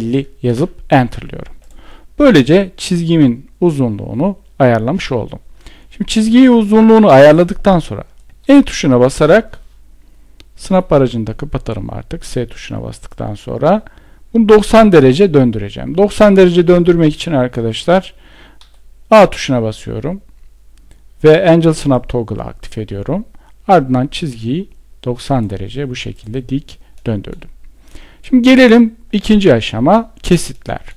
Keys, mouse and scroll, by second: 16.4 Escape.